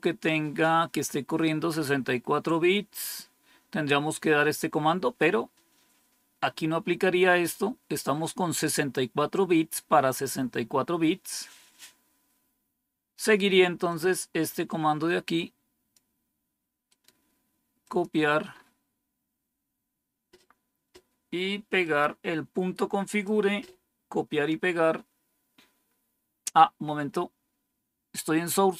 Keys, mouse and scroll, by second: 5.1-6.5 scroll up 2, 6.5-7.3 scroll down 2, 7.3-8.1 scroll down 1, 8.1-11.1 scroll up 2, 11.1-11.9 scroll down 2, 11.9-12.6 scroll down 1, 12.6-13.8 scroll down 1, 13.8-15.9 drag, 16.8 right click, 17.8 click, 18.4 scroll up 2, 19.6 scroll down 2, 21.7 right click, 22.9 click.